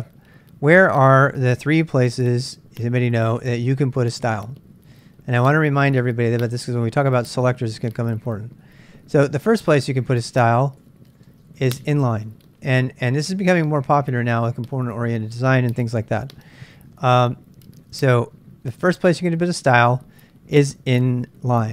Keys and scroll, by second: 10.9-21.0 typing, 14.5 Return, 14.5 ctrl+[.